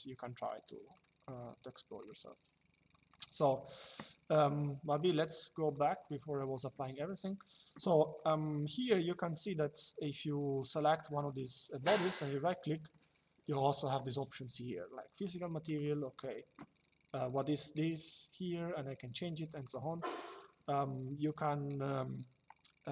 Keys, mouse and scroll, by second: 2.8 click, 4.6 click, 6.9 middle click, 10.9 click, 11.5 right click, 15.5 click, 19.4 click, 21.0 right click.